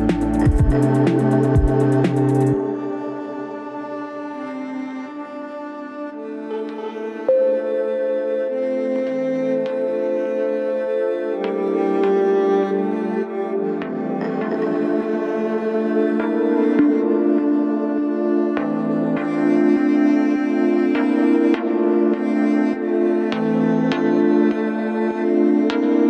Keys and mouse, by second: 0.7-1.4 middle drag, 1.5 Tab, 2.3 Tab, 3.3 click, 3.9-7.8 middle drag, 7.9 Tab, 8.5 Tab, 9.1-11.5 drag, 11.7 middle click, 13.1 Tab, 13.7 ctrl+s, 16.5 click, 18.4 middle click.